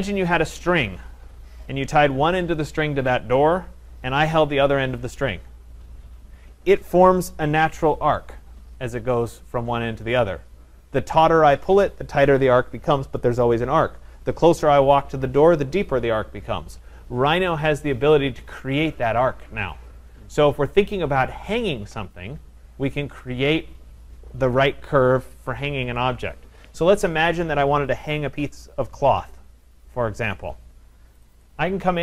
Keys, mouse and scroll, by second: 31.3 click, 31.4 click.